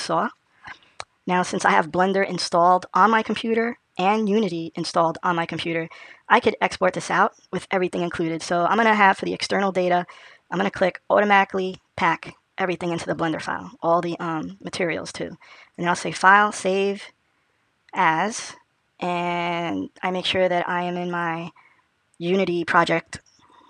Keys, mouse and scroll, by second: 7.7 click, 15.6 click.